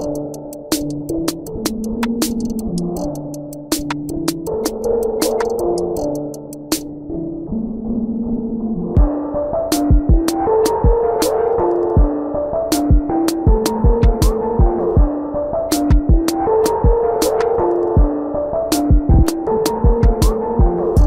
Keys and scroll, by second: 2.6 ctrl+-, 3.6 space, 5.5 ctrl+-, 5.7 ctrl+-, 6.0 ctrl+=, 7.1 ctrl+=, 8.3 ctrl+=, 10.2 space, 11.3 ctrl+-, 11.5 space, 12.5 ctrl+alt+z, 12.6 ctrl+-, 15.4 ctrl+=, 15.9 ctrl+=, 15.9 space, 17.3 space, 18.6 ctrl+=, 18.9 ctrl+=, 19.6 ctrl+=, 20.4 ctrl+-.